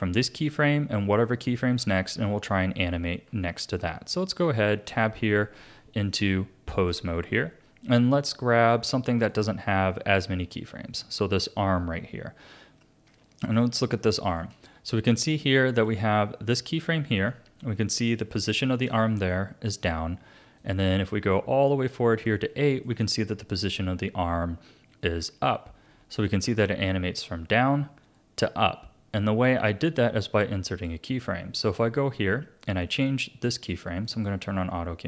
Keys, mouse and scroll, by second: 3.3-3.9 Tab, 5.1 Tab, 6.2 Tab, 9.4 click, 13.0-13.7 scroll up 2, 14.0-15.1 shift+middle drag, 15.1-17.3 drag, 17.3-20.6 middle drag, 20.6-22.6 drag, 22.6-25.6 shift+middle drag, 26.2-29.4 drag, 34.0 click.